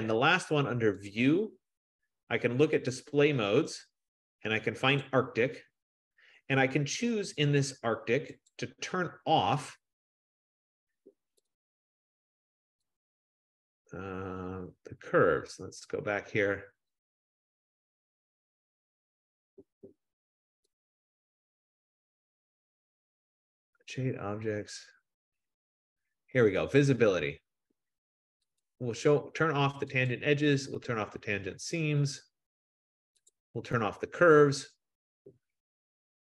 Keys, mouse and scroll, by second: 0.7-1.1 scroll down 6, 1.2 click, 3.0 click, 5.3 click, 8.8 click, 11.6 click, 13.0 click, 15.6 click, 24.3-25.1 scroll, 25.1-27.1 scroll, 28.8 click, 29.5 F15, 30.2 click, 33.4 click.